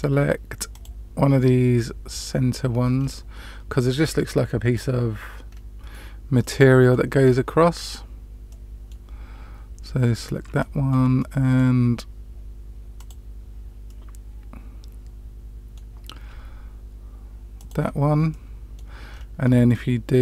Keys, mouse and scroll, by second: 0.6 click, 1.7 middle click, 2.9 scroll down 1, 3.0 scroll up 1, 3.0-3.7 scroll down 1, 5.5 scroll down 1, 6.3 middle click, 7.2-7.6 scroll down 2, 8.4 middle click, 10.1 scroll up 1, 10.5 shift+middle click, 11.1 middle click, 12.9 click, 13.8-15.7 middle drag, 17.5 shift+click, 18.2 middle click, 19.1-20.2 scroll down 1.